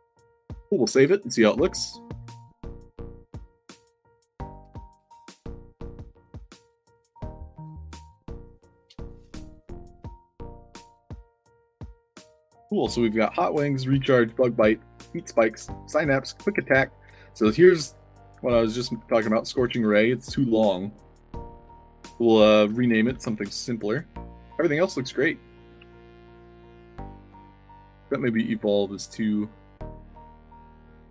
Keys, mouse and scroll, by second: 0.1 click, 0.5 ctrl+s, 5.8 click, 6.2 click, 7.0 click, 8.5 click, 9.8-10.7 typing, 11.7 s, 13.1-15.9 typing, 17.0-19.7 typing, 22.1-25.7 typing, 26.8 d, 27.4 Tab, 30.6 click.